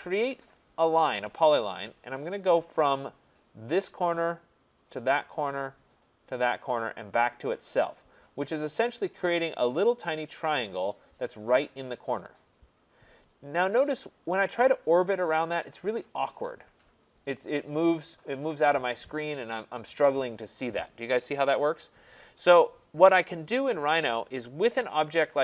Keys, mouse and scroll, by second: 0.3 click, 3.9 click, 5.0 click, 6.3 click, 7.8 click, 13.2 right click, 13.7 scroll, 15.4 right click, 15.8 scroll, 17.1-17.5 scroll, 19.6 scroll up 1, 21.6 right click, 24.2-24.5 scroll down 1, 25.2 middle click, 25.3 middle click.